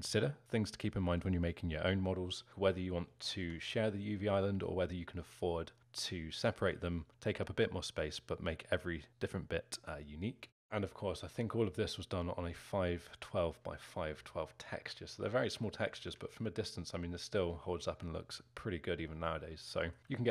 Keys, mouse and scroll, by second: 2.5 scroll up 1, 3.4 Tab, 8.1-12.3 scroll up 1, 15.6-16.0 scroll down 5, 16.0 Tab, 16.5-16.9 scroll down 2, 16.9-17.4 scroll up 2, 17.5-18.8 alt+middle drag, 18.8-19.2 scroll down 1, 19.2-20.3 alt+middle drag.